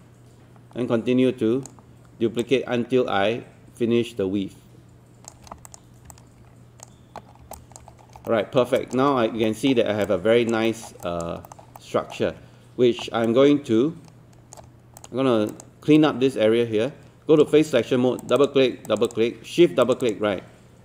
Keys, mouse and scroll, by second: 2.4-5.3 shift+drag, 5.7 click, 7.3 scroll down 1, 7.6 alt+click, 7.9 scroll up 1, 8.3 alt+middle click, 8.8 alt+click, 9.1-9.4 scroll up 1, 9.5 alt+middle click, 10.7 alt+middle click, 11.1 alt+click, 11.5 alt+middle click, 11.8 alt+middle click, 13.3 right click, 15.0 click, 16.0 right click, 18.2 click, 19.8 shift+click.